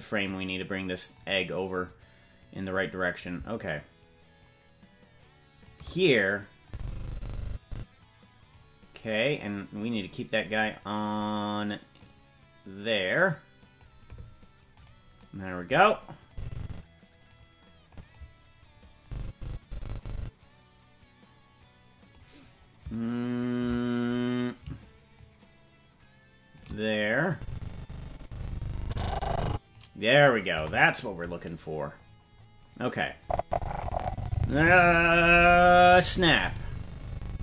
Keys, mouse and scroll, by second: 0.2 click, 1.8 click, 3.7-5.6 shift+drag, 6.6-8.5 drag, 9.0-9.9 scroll down 2, 9.9-11.9 scroll down 5, 11.9-13.8 drag, 14.8 right click, 16.3-17.3 drag, 17.9 click, 19.0-22.1 drag, 25.1-26.6 shift+drag, 27.3-29.7 drag, 30.5 KP_0, 31.9-33.2 scroll up 5, 33.2-37.4 drag, 33.2-34.4 scroll up 1.